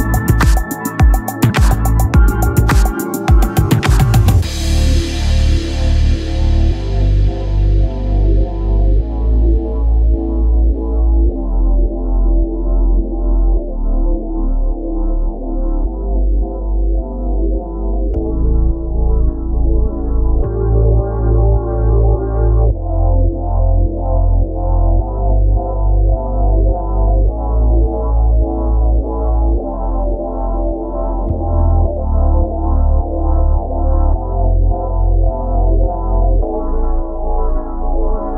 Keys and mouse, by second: 7.3 click, 14.9 click, 18.3 click, 20.5 click, 22.9 click, 25.5 click, 27.5 click, 34.9 click, 36.7 click.